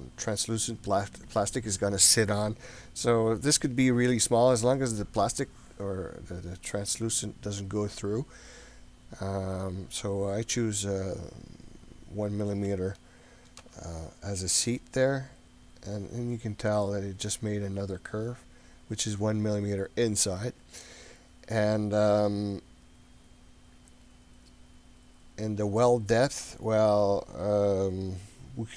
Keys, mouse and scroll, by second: 16.4-17.3 scroll up 4, 17.3-18.0 middle drag, 23.9-28.7 drag.